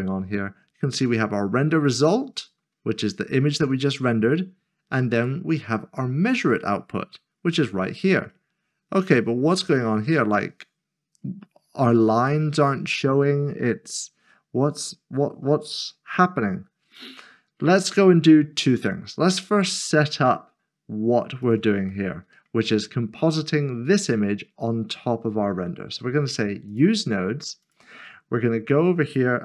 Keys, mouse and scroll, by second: 2.8-3.3 scroll down 1, 3.3-5.2 scroll up 1, 7.2-7.6 scroll down 1, 7.6 scroll up 1, 9.8 scroll down 1, 11.2 scroll up 1, 13.1 scroll down 1, 13.6-15.8 scroll up 1, 15.8 scroll down 1, 18.8 click, 21.5 click, 22.1 middle click, 22.6-24.8 scroll down 1, 26.7-27.1 scroll down 1, 27.1 click, 28.1 shift+middle click, 29.3 typing.